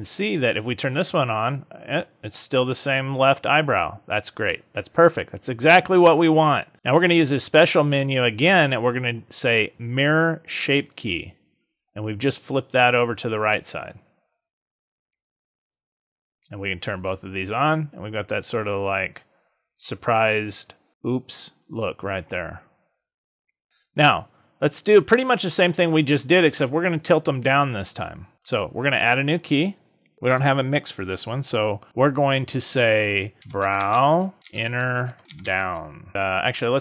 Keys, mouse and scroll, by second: 6.9 click, 13.4 click, 15.1 click, 16.4 click, 22.2 click, 23.4 click, 28.4 click, 30.0 click, 34.3 n.